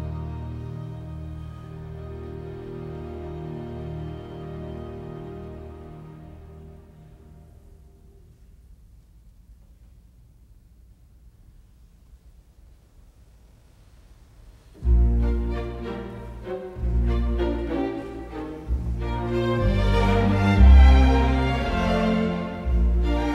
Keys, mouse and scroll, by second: 4.2 KP_Subtract, 4.7 KP_1, 5.0 Return, 7.7 Escape, 9.1 t, 9.3 space, 21.0 Escape, 21.3-22.5 typing.